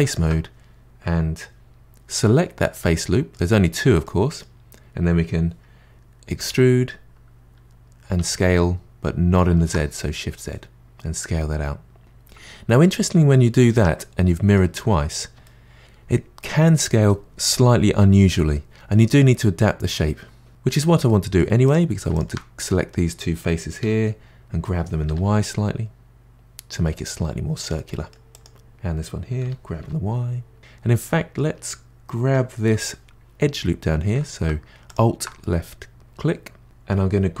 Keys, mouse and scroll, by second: 0.0 alt+click, 2.4-6.4 middle drag, 6.4 e, 12.7-13.3 scroll up 2, 13.3-14.9 middle drag, 14.9-15.4 scroll up 2, 15.4-17.7 middle drag, 20.5-21.6 middle drag, 21.6 click, 22.1 shift+click, 22.7-23.8 middle drag, 23.8 g, 27.9 middle click, 28.3 click, 29.4 g, 30.6 middle click, 32.8 2, 34.9 alt+click, 35.4-36.6 middle drag, 37.3 g.